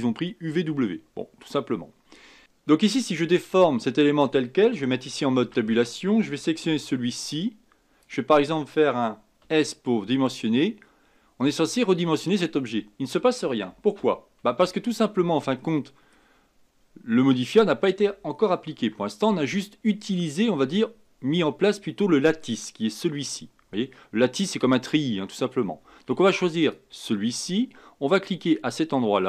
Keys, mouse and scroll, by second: 2.4 Tab, 5.4 Tab, 6.6 b, 9.4 s, 14.4 ctrl+z, 15.6-18.6 middle drag, 18.8 Tab, 21.7-24.9 middle drag, 26.6 click.